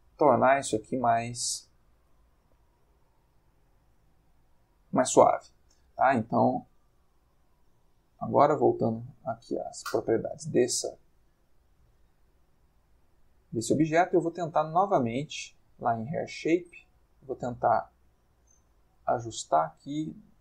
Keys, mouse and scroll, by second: 2.5-3.9 middle drag, 4.0-4.7 ctrl+middle drag, 5.3 middle click, 6.2 middle click, 7.2-8.3 middle drag, 10.5 middle click, 12.5-13.1 middle drag, 13.2 middle click, 15.2 click, 15.8 click, 17.3-19.6 drag, 19.0 Escape.